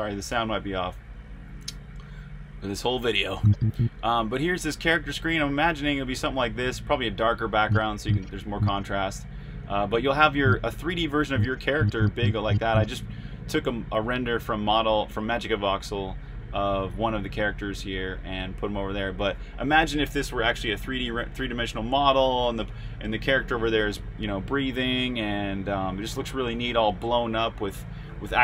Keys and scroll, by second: 0.0-3.3 typing, 8.1-8.8 typing, 10.2 typing, 11.4-13.0 typing.